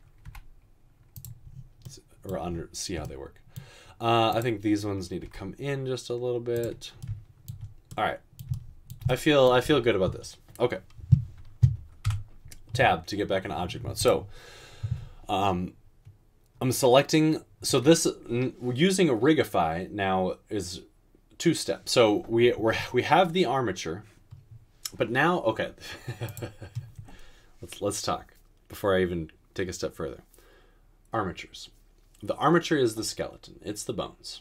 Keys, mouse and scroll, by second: 0.3 g, 5.4 g, 12.1 Tab.